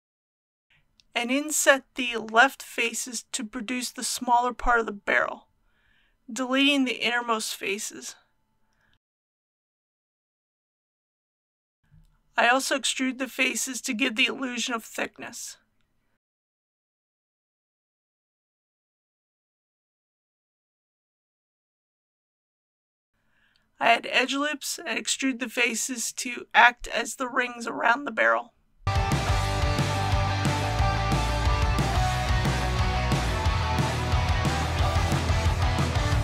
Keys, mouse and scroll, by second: 0.0 KP_3, 1.2 i, 3.4-4.4 drag, 6.1 scroll up 1, 8.4 x, 9.7 click, 11.5 2, 11.8 KP_3, 12.1 e, 17.6 click, 18.4-19.4 typing, 22.6 click, 23.1 KP_1, 24.3 ctrl+r, 27.3 click, 31.0 ctrl+r, 31.3 click, 34.5 ctrl+r, 34.9 click.